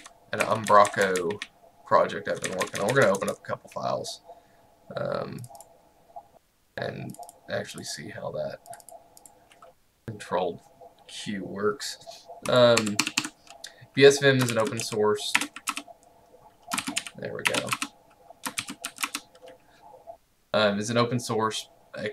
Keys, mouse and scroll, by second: 0.0 Down, 0.5 Right, 0.7 Down, 5.5 click, 12.5 click, 12.8 Escape, 14.5-15.5 typing, 15.7 Return, 16.7-19.4 typing, 17.8 Return.